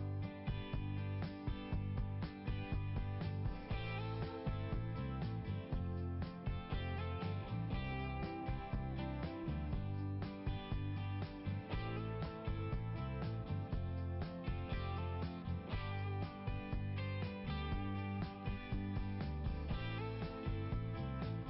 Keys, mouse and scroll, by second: 1.2 click, 1.3 click, 2.2 click, 2.4 click, 4.0 click, 4.1 click, 5.7 click, 6.0 click, 6.1 click, 6.2 click, 8.0 click, 8.3 click, 8.5 click, 8.6 click, 10.9 click, 10.9 click.